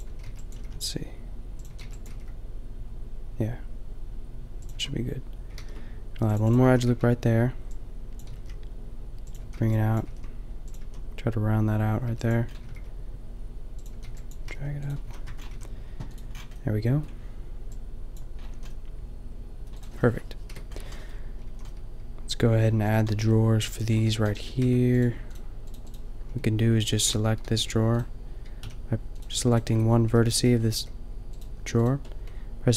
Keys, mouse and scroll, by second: 0.0 a, 0.2 b, 0.5 g, 1.6 a, 1.9 b, 2.1 g, 4.7 a, 5.6 ctrl+r, 6.6 a, 6.9 b, 8.2 g, 9.3 a, 9.5 b, 10.0 g, 10.8 a, 12.1 b, 12.5-13.7 drag, 12.6 g, 13.8-15.5 typing, 14.2 click, 15.2 Tab, 18.5 a, 20.5 KP_5, 21.4 a, 24.6 Tab, 26.2 click, 27.0 ctrl+l, 27.5 g, 28.6 a, 29.7-31.3 drag, 30.1 g, 30.8 g, 31.6 g.